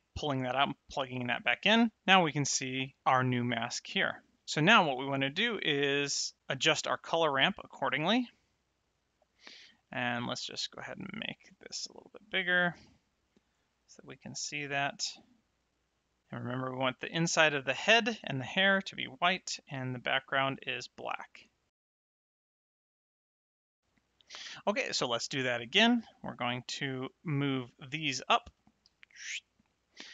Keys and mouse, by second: 7.3 click, 11.4 s, 12.7 click, 13.7 middle click, 15.5 click, 16.5 click, 19.5 click, 20.7 click, 21.7 click, 22.0 click, 22.5 click, 23.4 middle click, 26.0 middle click, 27.3 click, 28.8 g, 29.5 click.